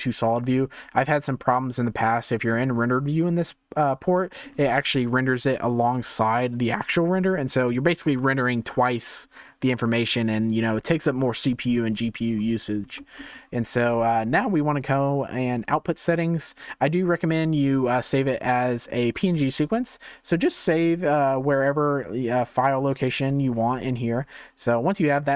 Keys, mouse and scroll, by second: 2.0-2.4 scroll down 1, 2.4 shift+middle click, 3.4-4.1 scroll down 1, 4.1-12.4 shift+middle drag, 12.4-13.0 scroll up 1, 13.0-22.8 shift+middle drag, 22.8-25.3 drag.